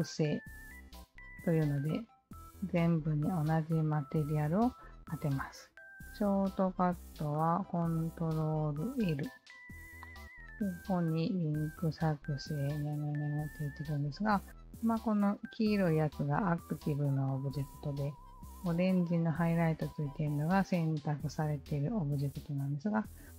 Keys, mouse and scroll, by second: 9.0 ctrl+l.